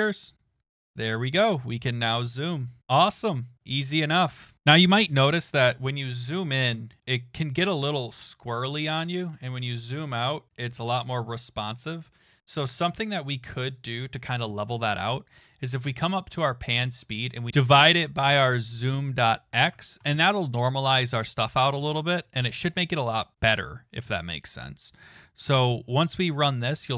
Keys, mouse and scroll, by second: 15.7 click, 17.7-19.7 typing, 25.6 click.